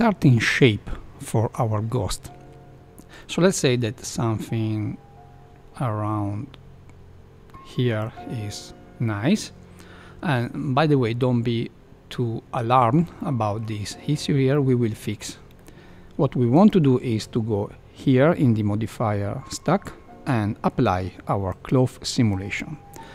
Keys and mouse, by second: 2.2-2.7 middle drag, 3.1-8.0 drag, 8.5-10.4 middle drag, 13.1 middle click, 14.5 middle click, 15.5 middle click, 16.5 click, 21.6-22.6 drag.